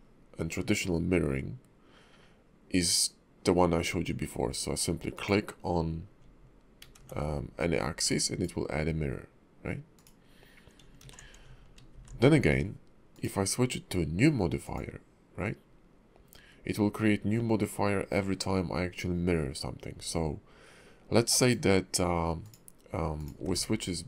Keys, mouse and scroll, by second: 5.1 click, 6.8 ctrl+`, 11.0 ctrl+z, 11.9 alt+x, 13.1 click, 22.4 click, 23.1 click, 23.4 alt+x.